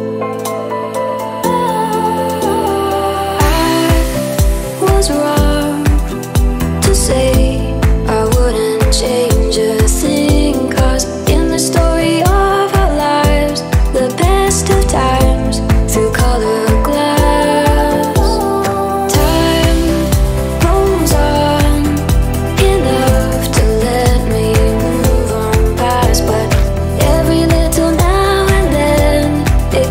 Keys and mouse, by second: 2.3-5.4 middle drag, 5.4-8.3 drag, 8.3-12.2 middle drag, 12.2-15.3 drag, 15.9-17.6 middle drag, 17.6 click, 18.6 click, 19.4-20.1 middle drag, 20.1 r, 21.5 Tab, 22.3 r, 24.4 Tab, 24.9-26.7 shift+middle drag, 26.7 click, 27.6-29.1 middle drag, 29.1-29.9 drag.